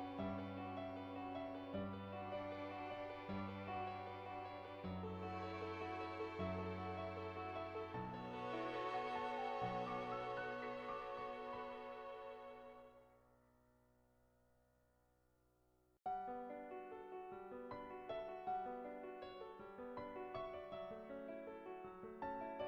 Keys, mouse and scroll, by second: 0.2 ctrl+z, 1.2 shift+middle click, 1.5 middle click, 1.9 shift+middle click, 2.7 Tab, 4.9 middle click, 6.4 shift+s, 7.2 Tab, 8.5 click, 8.9 click, 9.3 click, 9.6 click, 10.2 click, 10.5 click, 11.0 click, 11.4 click, 12.1 middle click, 14.9 click, 15.8 click, 16.2 click, 16.7 click, 17.1 click, 18.0 click, 18.8-19.9 middle drag, 20.4 ctrl+z, 21.2 click, 21.6 click, 22.2 click.